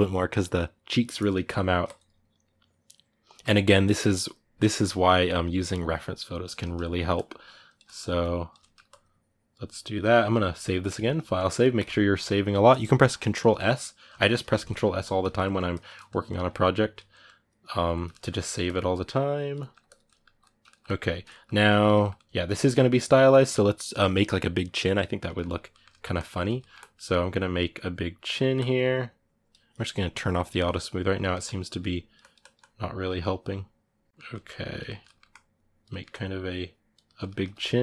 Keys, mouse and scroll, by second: 6.3 ctrl+middle click, 6.9 click, 7.6 ctrl+middle click, 8.0 click, 8.4 ctrl+middle click, 8.6-15.2 drag, 15.2 middle click, 15.5 click, 15.7 middle click, 16.0 click, 16.9-18.4 middle drag, 18.4 click, 19.3 middle click, 19.6 click, 19.8-25.9 middle drag, 25.9 click, 26.4 ctrl+middle click, 26.5-28.1 drag, 28.1 middle click, 28.3-31.0 drag, 31.0 ctrl+middle click, 31.2-34.1 drag, 34.1 middle click, 34.4 click, 34.6 ctrl+middle click, 35.1 click, 35.7 middle click, 35.9 click, 36.8 ctrl+middle click, 37.6 click.